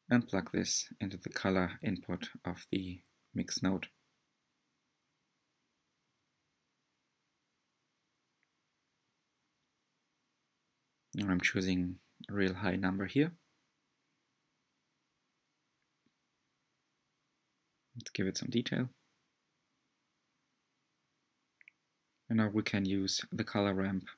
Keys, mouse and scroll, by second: 0.4 click, 3.2-6.5 drag, 9.5-13.2 drag, 16.2-17.3 scroll down 3, 17.8-18.7 scroll down 3, 18.7-20.1 scroll down 1, 20.1-21.6 scroll down 1.